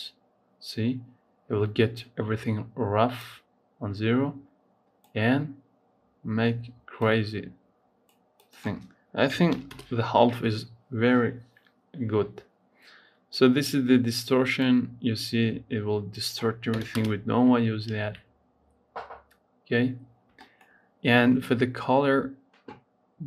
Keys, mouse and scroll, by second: 3.0-6.0 drag, 6.9-11.2 drag, 13.2-17.8 drag, 17.8 ctrl+s, 19.8-20.3 scroll down 1, 20.3-23.2 shift+middle drag.